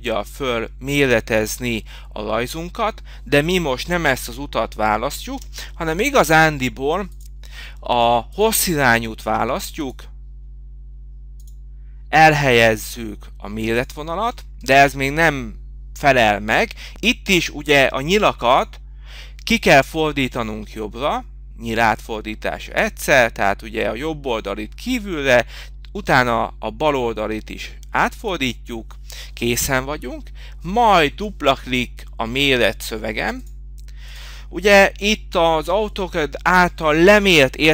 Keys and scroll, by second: 8.4 BackSpace, 20.7 Left, 31.9 shift+5.